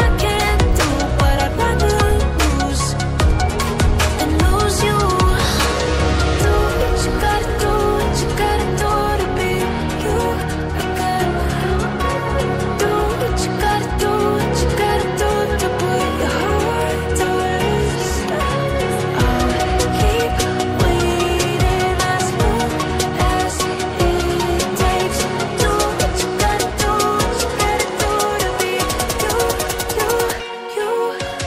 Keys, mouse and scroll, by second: 2.5 scroll up 1, 3.3 click, 4.7 scroll down 1, 5.7-6.6 scroll up 1, 6.6 click, 6.7 double click, 7.2-7.5 scroll down 1, 8.8-9.5 scroll down 1, 9.5-10.0 scroll up 1, 10.6-12.6 scroll down 1, 13.1 click, 16.7 ctrl+c, 16.9 ctrl+v, 17.9 click, 19.0 right click, 19.0 click, 22.6 scroll up 1, 23.1 click, 24.5-24.9 scroll up 1, 24.9 click, 25.8-27.0 scroll down 1, 27.7-28.1 scroll down 1, 28.7 click.